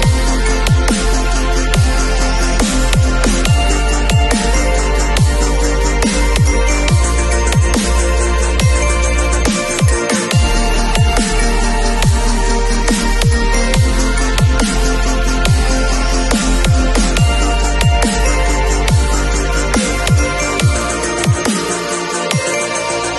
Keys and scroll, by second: 2.5 0, 9.0 [, 11.2 ], 18.9 v.